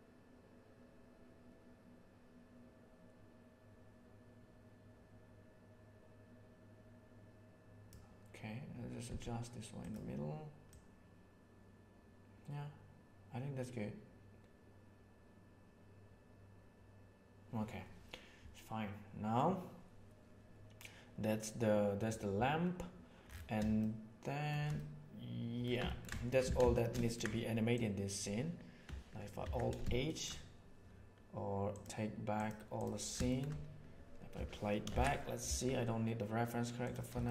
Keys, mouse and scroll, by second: 6.4 click, 9.0 g, 10.7-13.4 drag, 23.8-24.6 shift+middle drag, 24.7-25.6 middle drag, 25.9 ctrl+middle click, 26.1 shift+middle click, 26.6 alt+shift+a, 26.7 shift+middle click, 27.7-28.1 right drag, 29.4 alt+h, 30.1 shift+middle click, 31.7 right click, 33.2 shift+middle click, 34.9 shift+Left, 37.2 shift+middle click.